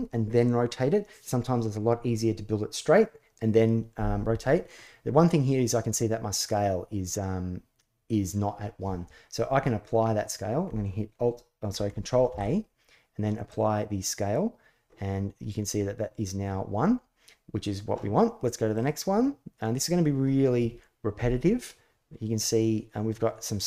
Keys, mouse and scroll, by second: 12.0 ctrl+a.